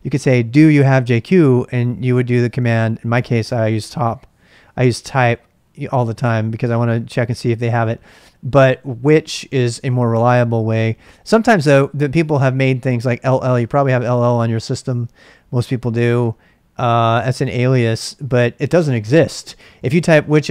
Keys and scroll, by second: 13.2 l, 13.3 l, 13.6 Return, 19.3-20.5 typing.